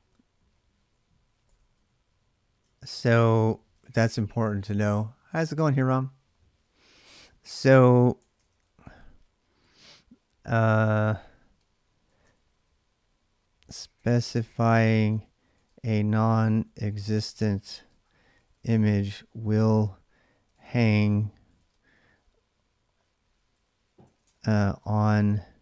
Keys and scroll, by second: 0.0-4.7 typing, 3.6 ctrl+[, 7.9-12.4 typing, 13.5-24.9 typing.